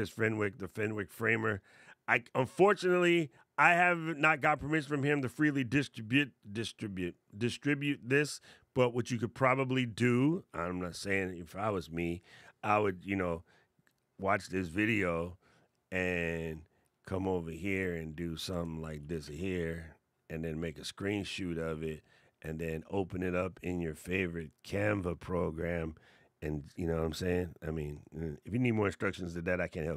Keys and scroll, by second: 18.7 shift+super+4.